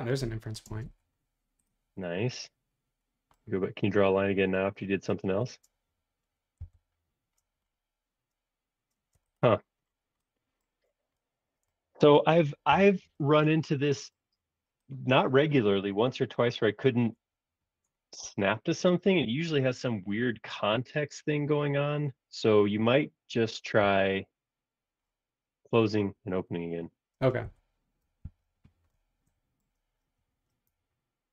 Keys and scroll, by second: 0.7 space, 0.9 Escape, 6.6 l, 8.9 space, 9.1 o, 12.7 super+s, 19.3 super+1, 23.8 l, 26.1 Escape, 27.1 space, 28.2 super+s.